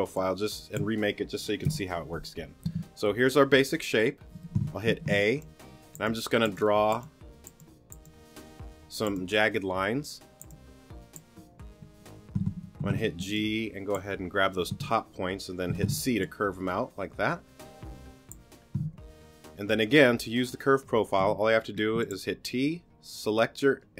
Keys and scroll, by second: 1.6 BackSpace, 4.9 a, 12.8 g, 15.7 c, 18.8 t, 21.2 t.